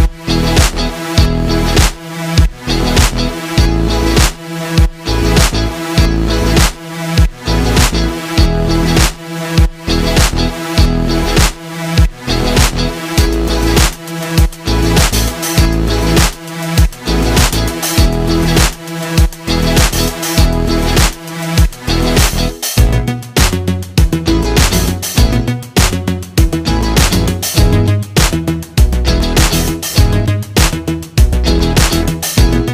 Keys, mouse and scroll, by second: 1.2-5.3 drag, 7.6 click, 9.9 Tab, 12.9-20.0 drag, 22.6 click, 25.4-32.7 drag.